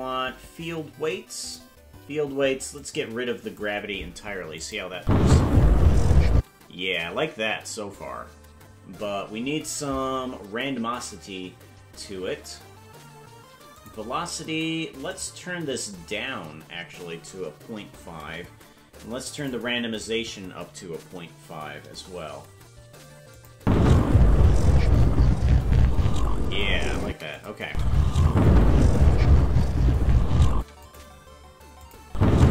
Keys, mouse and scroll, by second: 1.4 click, 2.7 click, 4.6 click, 5.0 space, 6.3 space, 13.7 click, 15.0-18.4 drag, 19.3-22.0 drag, 23.3 click, 23.5 space, 27.0 space, 27.3 click, 27.6 space, 30.6 space, 30.8 click, 31.8 click.